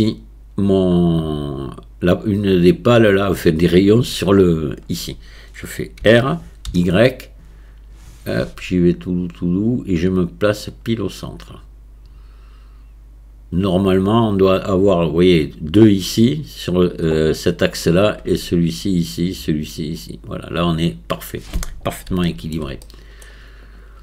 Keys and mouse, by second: 6.0 r, 22.3 shift+click, 22.8-23.3 middle drag, 23.7 click.